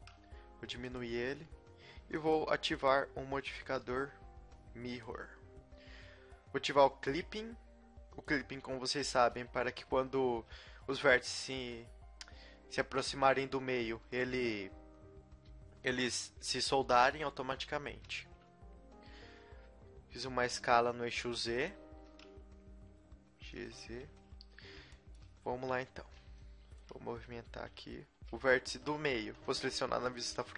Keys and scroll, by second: 0.2 s, 9.1 g, 13.5 a, 17.6 a, 17.9 s, 21.9 g, 23.8 a, 26.1 b, 27.1 g, 28.7 a, 29.1 b.